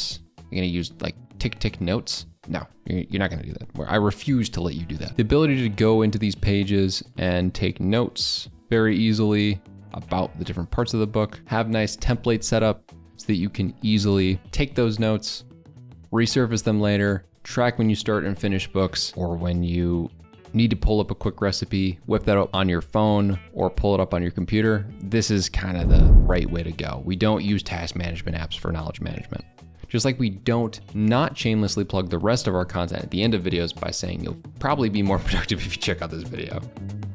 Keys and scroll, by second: 5.1 alt+Tab.